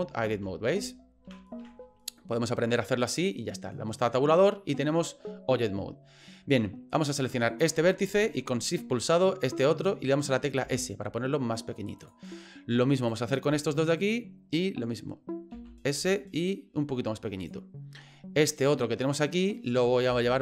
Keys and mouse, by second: 0.3 Tab, 0.8 Tab, 1.3 Tab, 1.6 Tab, 7.4 right click, 9.4 shift+right click, 10.6 s, 13.0 right click, 13.9 shift+right click, 15.5 s, 18.6 right click, 20.1 g.